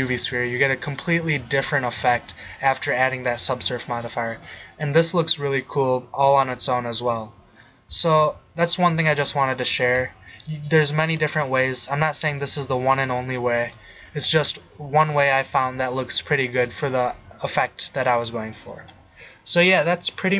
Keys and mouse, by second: 2.1 middle click, 2.8 middle drag, 4.5-5.4 middle drag, 6.4 middle click, 11.2-11.7 drag, 14.5-15.0 drag.